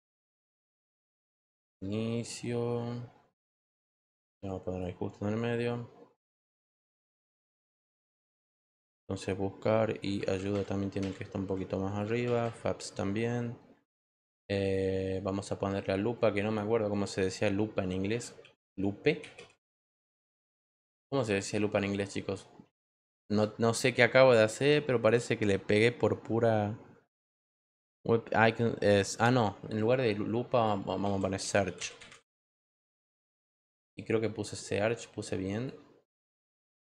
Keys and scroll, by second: 18.0-19.8 typing, 30.7-32.5 typing, 35.9-36.8 typing.